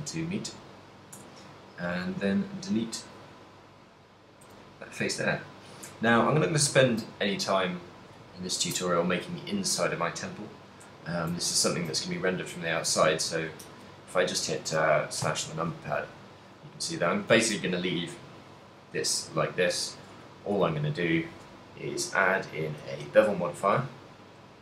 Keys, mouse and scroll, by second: 0.5 right click, 1.4 Tab, 3.1 click, 4.1 right click, 4.6 x, 6.4 shift+middle click, 6.9 ctrl+middle click, 7.7 middle click, 8.5 ctrl+middle click, 9.1 shift+middle click, 11.6 ctrl+middle click, 12.5 middle click, 13.2 ctrl+middle click, 15.3 KP_Divide, 16.0 ctrl+middle click, 16.4 middle click, 17.2 shift+middle click, 17.5 ctrl+middle click, 17.9 middle click, 19.4 middle click, 20.2 middle click, 20.5 Tab, 20.8 shift+middle click, 21.7 shift+middle click, 22.3 click, 22.9 click.